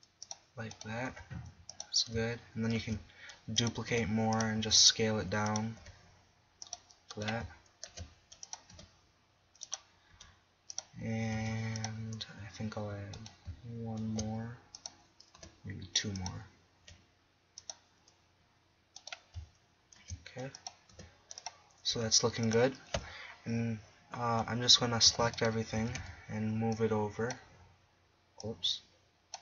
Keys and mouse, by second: 1.1 g, 2.8 shift+d, 3.9 r, 4.6 s, 5.8 g, 7.9 shift+d, 8.8 r, 10.1 g, 11.3 s, 14.1 shift+d, 15.4 r, 16.8 g, 17.7-18.7 drag, 18.8 click, 20.0 shift+d, 21.0 r, 21.9 g, 24.8 s, 25.5-28.7 drag, 25.8 a, 26.0 a.